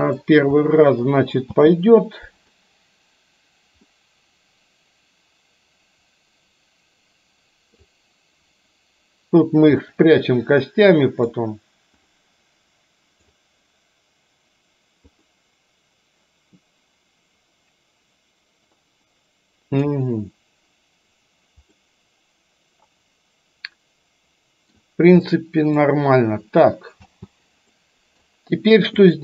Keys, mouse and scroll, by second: 0.0 click, 0.8 middle click, 1.5 space, 3.9-7.9 middle drag, 10.0-11.4 middle drag, 12.2-13.3 middle drag, 15.3-19.9 middle drag, 21.8-24.8 middle drag, 25.4 middle click, 27.0 space, 27.8-28.3 middle drag, 29.0 click.